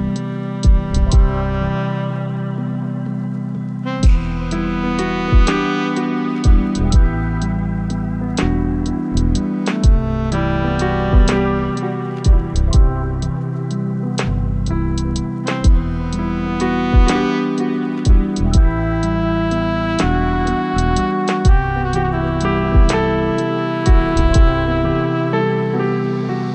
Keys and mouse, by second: 0.2-1.8 drag, 5.3 click, 9.9 right click, 11.1 ctrl+z, 13.0 click, 14.4 click, 16.3 click, 17.0 click, 17.4 click, 17.9 click, 18.1 click, 19.1 click, 20.2 click, 20.8 click, 21.7 click, 22.2 click, 23.1 middle click, 23.8 middle click, 25.0 Tab.